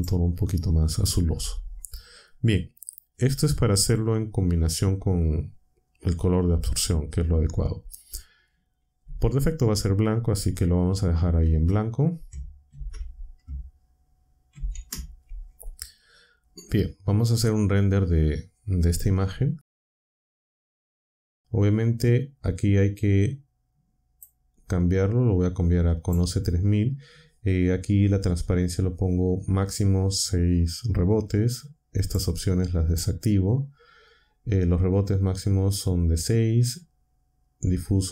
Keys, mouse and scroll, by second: 11.4 ctrl+c, 12.7 ctrl+v, 14.5 ctrl+v, 17.7 0, 24.1 click, 26.0 click, 31.9 click, 32.8 click.